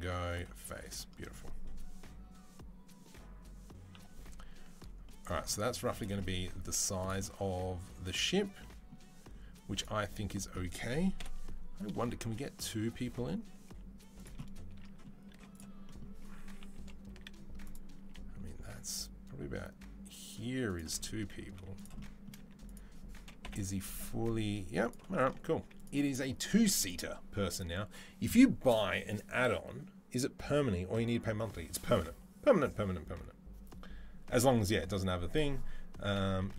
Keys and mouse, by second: 0.2-9.5 middle drag, 3.7 KP_3, 5.5 z, 6.6 z, 9.5 click, 11.0 KP_7, 12.1 g, 15.1 z, 16.4 KP_3, 16.9 z, 17.5-36.5 middle drag, 17.8 g, 21.3 z, 22.2 z, 23.2 KP_7, 23.9 g, 25.3 z.